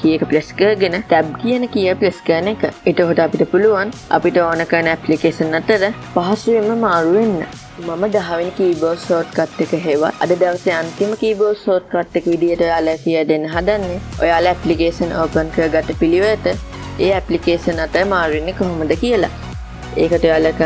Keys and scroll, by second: 2.4 alt+Tab, 5.3 alt+Tab.